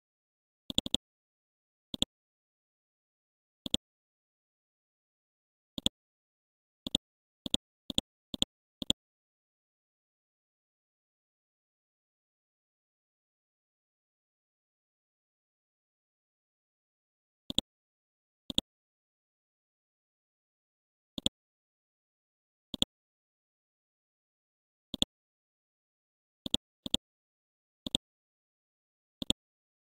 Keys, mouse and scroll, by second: 0.6 click, 2.9 scroll up 1, 3.6 click, 4.2 scroll up 1, 5.7 click, 8.3 ctrl+click, 12.5 Down, 12.8 typing, 15.4-16.4 scroll up 1, 17.5-24.7 drag, 25.3-26.4 scroll down 1, 26.4 click, 29.2 ctrl+click.